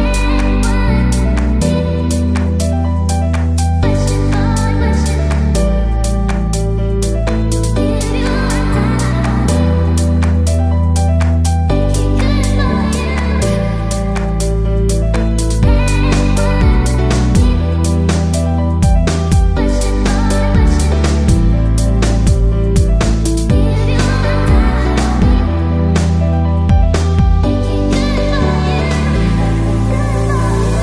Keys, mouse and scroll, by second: 1.6-3.8 drag, 3.2 middle click, 3.2 s, 4.5-5.5 middle drag, 5.5-9.0 drag, 9.6 a, 10.5-12.7 drag, 12.7-14.5 middle drag, 16.5-19.9 right drag, 20.2-26.8 drag, 27.9-30.6 drag.